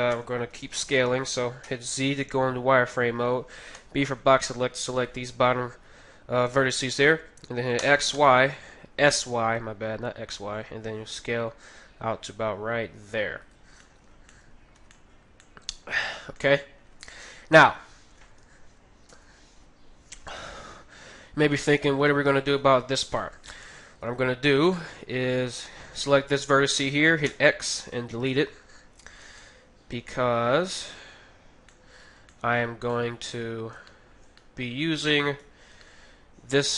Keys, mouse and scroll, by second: 0.1 a, 0.5 b, 1.3-3.2 right drag, 1.6 z, 3.8 b, 7.7 s, 8.1 s, 13.8-20.2 middle drag, 14.7 z, 17.6 KP_3, 19.1 KP_1, 23.2-25.3 middle drag, 24.6-27.2 right drag, 27.2 x, 28.3-36.7 middle drag, 35.2-36.7 right drag.